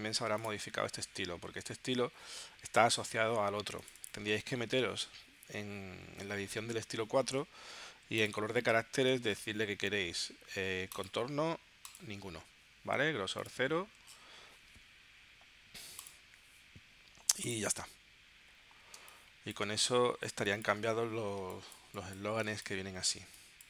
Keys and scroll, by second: 19.0 space, 20.3 space.